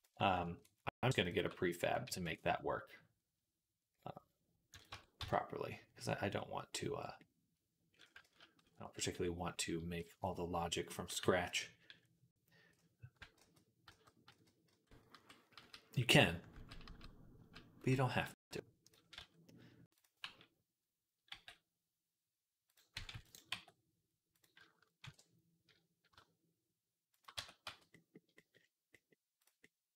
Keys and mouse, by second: 1.1 alt+shift+click, 1.3-9.0 ctrl+middle drag, 1.9 ctrl+b, 4.8 Tab, 5.0 z, 8.1 ctrl+z, 8.4 ctrl+z, 9.0 ctrl+z, 10.0 KP_6, 10.9 KP_3, 13.2 ctrl+z, 13.7 ctrl+z, 14.9 ctrl+z, 14.9-18.7 ctrl+middle drag, 15.0 ctrl+z, 16.4 ctrl+z, 17.7 ctrl+z, 18.7-19.8 drag, 19.0 z, 19.8-29.9 middle drag, 21.1 g, 22.9 ctrl+r, 23.3 g, 24.9 ctrl+b, 27.2 Tab, 27.5 z.